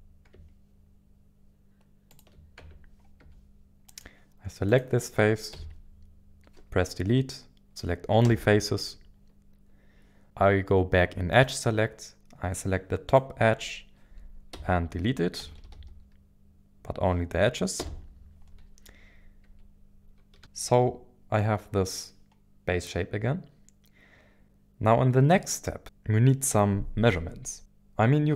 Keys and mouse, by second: 2.1 ctrl+click, 2.6 Tab, 3.2 Tab, 3.2 Tab, 3.9 click, 4.7 click, 5.5 Tab, 5.5 Delete, 11.3 click, 13.0 click, 14.5 Delete, 15.6 Up, 15.7 Up, 19.5 Tab, 20.4-20.8 shift+middle drag.